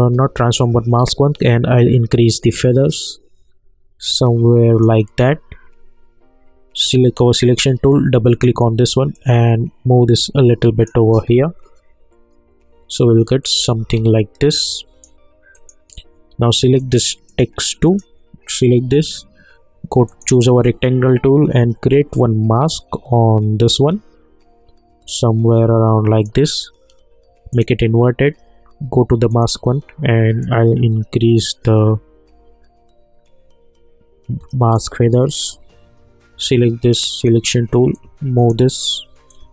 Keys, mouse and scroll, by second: 1.5-3.1 drag, 7.0 click, 11.1 space, 13.8 space, 14.5 click, 20.1-37.0 drag, 37.1-39.5 drag.